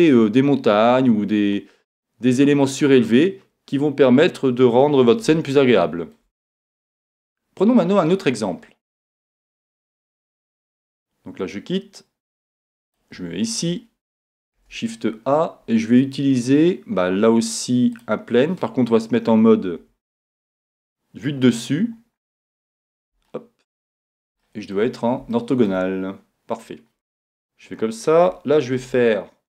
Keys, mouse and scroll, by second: 5.4-7.3 middle drag, 8.7-9.3 scroll down 1, 9.3-10.5 scroll down 1, 10.5 scroll down 1, 10.9 Tab, 12.8-14.8 drag, 14.6 shift+a, 19.8 KP_7, 21.6-27.9 middle drag, 27.3 Tab, 28.8 ctrl+r.